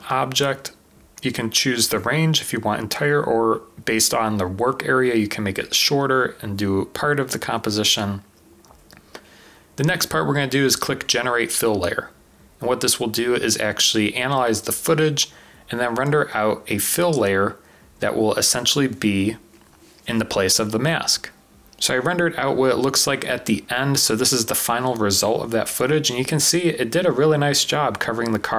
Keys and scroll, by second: 12.5 typing.